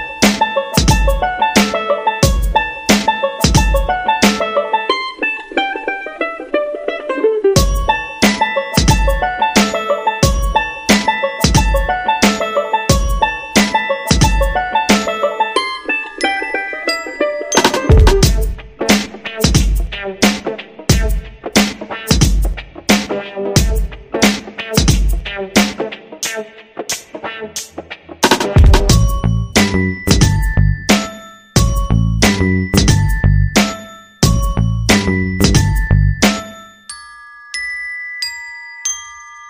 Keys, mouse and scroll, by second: 4.5 click, 5.9-19.4 drag, 19.6 Left, 19.9 Down, 20.2 typing, 21.5-27.4 drag, 29.4 click, 31.5 shift+click, 32.3 shift+click, 32.9 shift+click, 33.8 click, 38.0 shift+click.